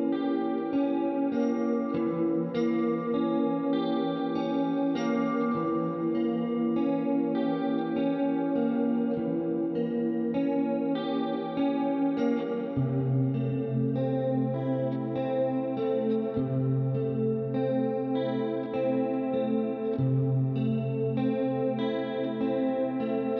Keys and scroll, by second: 0.0-0.3 typing.